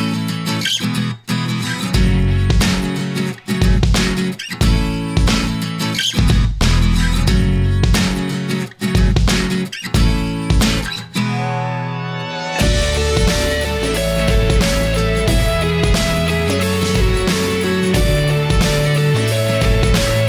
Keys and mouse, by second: 8.3-9.8 drag, 10.8-12.2 drag, 12.8 middle click, 14.2-15.8 drag, 17.5-18.9 middle drag, 19.7 middle click.